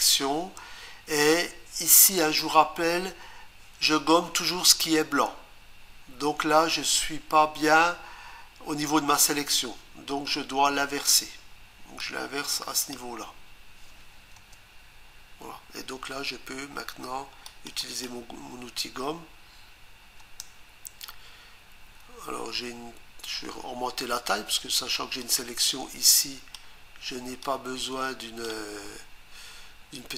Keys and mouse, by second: 12.0 click, 14.4 Return, 17.5 click, 17.8 click, 20.2 Return, 25.2 click, 27.4 click.